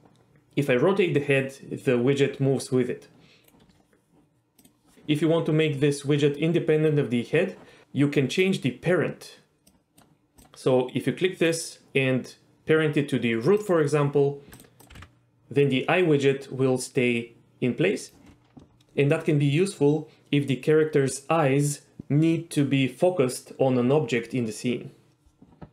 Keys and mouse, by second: 9.7 click, 10.4-14.0 drag, 14.5 click, 14.8 click, 14.9 r, 15.0 r, 18.0 right drag.